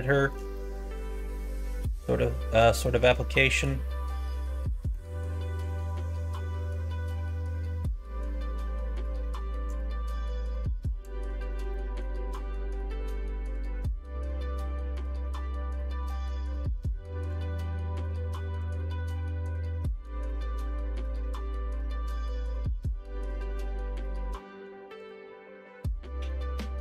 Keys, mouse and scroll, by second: 0.0 shift+middle click, 0.5 middle click, 1.1 middle click, 1.7 shift+middle click, 2.2 middle click, 2.8 middle click, 3.3 shift+middle click, 3.8-4.9 middle drag, 5.6 middle click, 9.8-11.0 drag, 11.7 middle click, 17.4-18.9 drag, 19.4 middle click, 22.2 click, 24.9-26.8 drag.